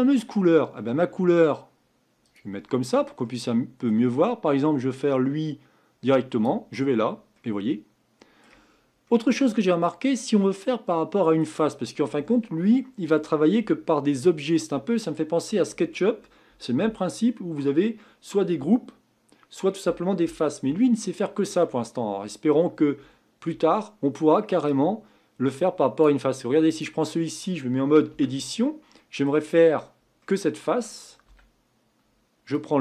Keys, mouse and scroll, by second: 0.4-1.0 scroll down 2, 2.2 click, 3.2-4.9 middle drag, 4.9-6.5 drag, 7.3-8.7 middle drag, 8.7 scroll up 4, 10.2 scroll up 1, 10.4-11.7 middle drag, 11.7-14.7 scroll down 2, 24.7-26.0 drag, 26.7 click, 28.1 Tab, 28.5 scroll up 4, 29.0 middle click, 29.8 scroll down 2, 30.2-31.2 middle drag, 31.2 a, 32.5-32.8 drag.